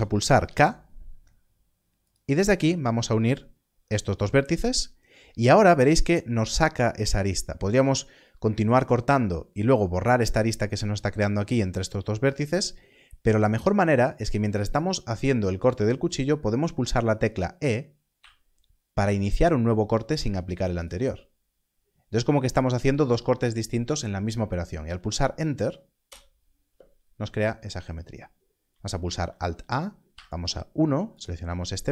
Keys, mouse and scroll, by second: 0.3 k, 2.0 click, 18.1 click, 20.7 click, 26.0 click, 26.0 Return, 28.6 Return, 29.0 alt+a, 30.0 1, 31.1 click.